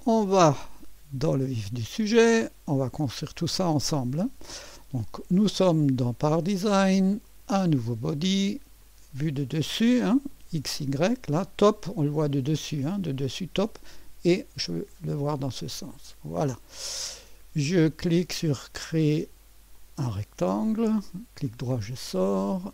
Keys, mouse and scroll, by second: 0.0 click, 2.4 click, 3.5 click, 7.2 click, 8.8 click, 10.3 click, 15.7 click, 18.5 click, 19.7 click, 20.7 click, 21.5 middle click.